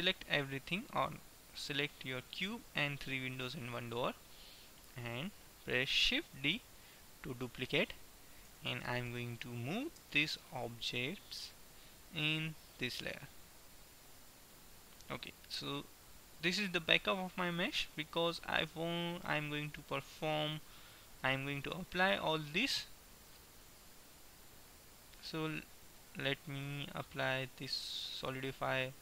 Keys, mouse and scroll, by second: 0.0 click, 0.6-3.3 right drag, 4.0-5.5 middle drag, 6.5 shift+d, 10.1 m, 16.3-18.1 middle drag, 20.0-21.1 middle drag, 21.1 click, 21.5 middle click, 22.1-24.0 right drag, 24.5-26.3 drag, 26.6-29.0 drag.